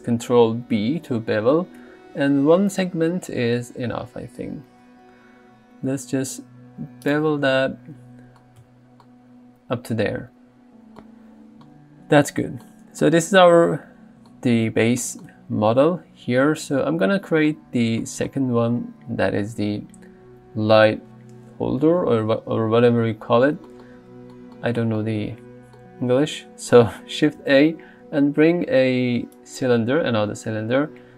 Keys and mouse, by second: 0.8 ctrl+b, 8.6 Tab, 27.4 shift+a.